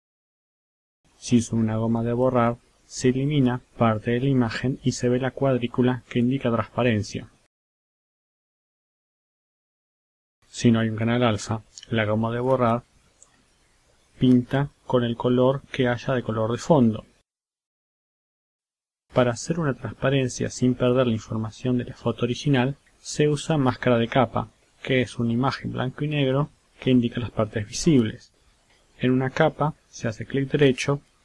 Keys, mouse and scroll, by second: 2.6 click, 4.9 click, 5.8-8.6 drag, 11.2 right click, 13.3 click, 15.6 click, 16.3 click, 16.8-18.8 drag, 20.8-22.3 drag, 22.8 click, 23.7 click, 24.9 click, 26.4 click, 29.3 click.